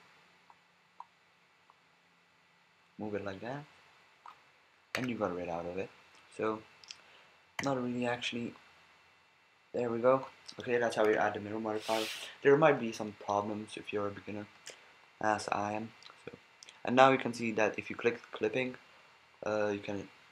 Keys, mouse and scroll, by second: 4.9 a, 7.6 Tab, 10.2-10.5 drag, 11.0 Tab, 14.6 b, 19.3-20.3 drag.